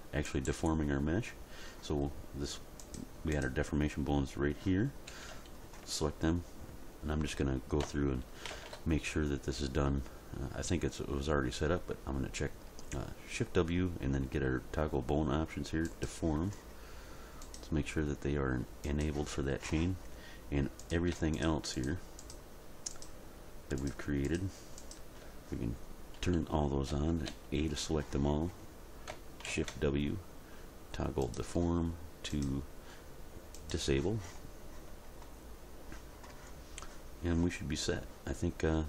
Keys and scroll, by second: 5.1 a, 8.5 shift+w, 26.2 a, 29.5 shift+w.